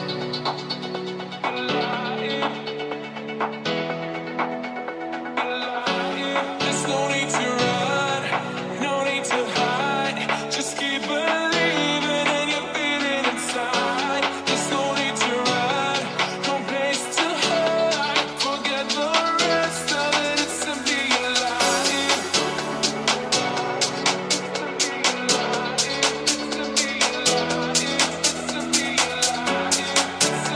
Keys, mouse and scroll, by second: 2.1 Tab, 2.6 Tab, 2.7 Tab, 3.0 Tab, 3.2 click, 3.4 g, 11.3 click, 11.7 ctrl+Tab, 12.0-17.1 ctrl+middle drag, 17.1-22.7 ctrl+drag, 17.3 ctrl+z, 23.2 shift+click, 23.9 f, 24.2 middle click, 24.8-30.5 drag.